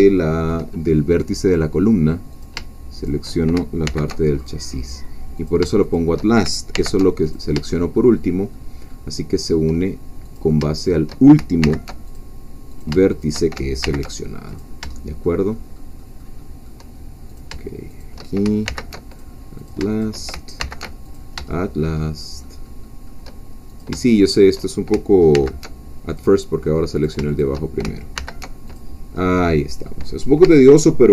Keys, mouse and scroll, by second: 0.1 shift+middle click, 2.3 shift+click, 3.1 shift+click, 3.9 alt+m, 4.4 alt+click, 5.5 shift+click, 6.7 alt+m, 7.2 alt+click, 7.7 alt+shift+middle click, 8.5 shift+middle click, 9.2 shift+middle click, 10.4 click, 10.7 shift+click, 11.6 alt+m, 12.1 alt+click, 12.8 shift+click, 13.8 alt+shift+m, 14.5 click, 14.9 shift+middle click, 15.5-17.3 shift+middle drag, 17.3 shift+click, 18.0 shift+click, 18.7 alt+m, 19.1 alt+click, 19.7 alt+shift+click, 20.6 alt+shift+m, 21.0 alt+click, 21.5 alt+shift+middle click, 22.0 shift+middle click, 23.7 shift+click, 24.4 shift+click, 25.3 alt+m, 26.1-27.2 drag, 27.4 shift+click, 28.1 alt+m, 28.7 alt+click, 29.2 alt+middle click.